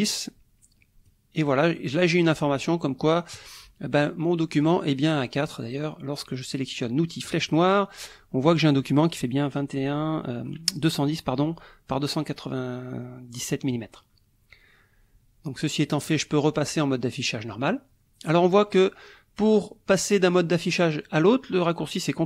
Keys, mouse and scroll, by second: 4.6 click, 7.2 click, 16.1 click.